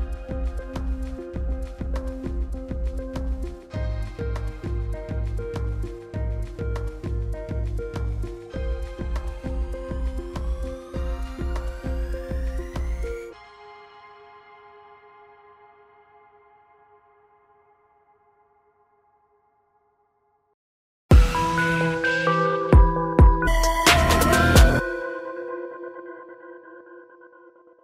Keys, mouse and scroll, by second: 9.2 Right, 11.2 Left, 12.2 Right, 13.0 Right, 14.2 Right, 15.6 click.